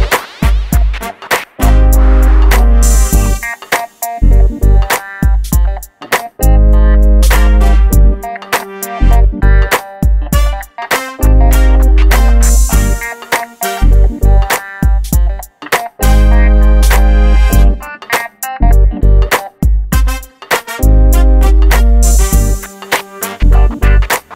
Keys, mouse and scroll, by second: 0.5-0.8 scroll up 1, 1.1 shift+click, 1.8 shift+g, 2.1-2.5 scroll down 1, 2.5 middle click, 2.7-3.3 scroll down 1, 3.3 middle click, 4.9-5.2 scroll up 1, 5.7 click, 6.7 shift+click, 7.5 middle click, 8.1-9.7 middle drag, 9.7 click, 10.1 shift+click, 10.3 scroll up 1, 10.5 middle click, 11.0 scroll up 1, 11.5 middle click, 12.1-12.9 scroll up 2, 12.2 shift+middle click, 13.1 middle click, 15.2 m, 16.5 ctrl+click, 17.4 shift+middle click, 19.4 middle click, 19.7 scroll down 1, 22.6 shift+middle click, 23.3-23.8 scroll up 1, 23.9 ctrl+d, 24.2-24.3 scroll up 1.